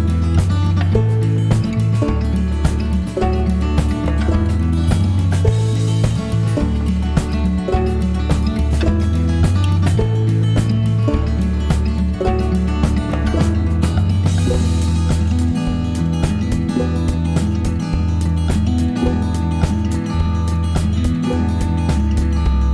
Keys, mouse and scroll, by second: 2.3 click, 5.1 3, 6.2 click, 8.1 5, 8.8 click, 10.2 right click, 11.5 click, 17.0 click, 17.4 click.